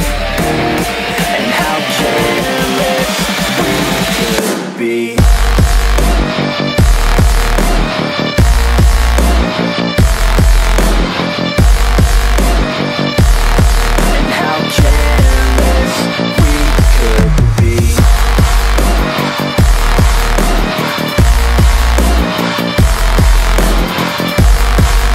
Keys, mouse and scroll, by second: 3.0 ctrl+-, 6.1 click, 8.3 click, 13.2 click, 16.1 click, 16.3 Up, 19.1-25.1 drag.